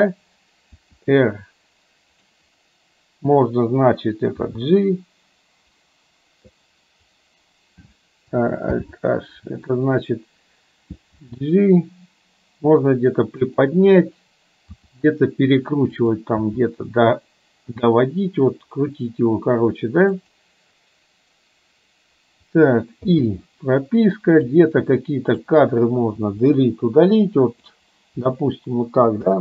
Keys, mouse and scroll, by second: 0.9 r, 4.5 h, 8.8 alt+h, 11.1 g, 14.9 r, 16.5 g, 23.1 i, 24.5-25.5 drag, 26.3 Delete, 27.4-27.8 drag, 28.3 Delete, 29.3 space.